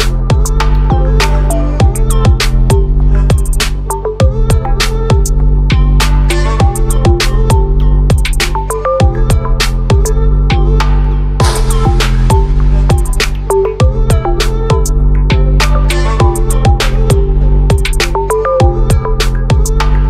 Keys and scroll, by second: 0.9 ctrl+z, 10.0 ctrl+t, 16.1 ctrl+=, 19.4 ctrl+0.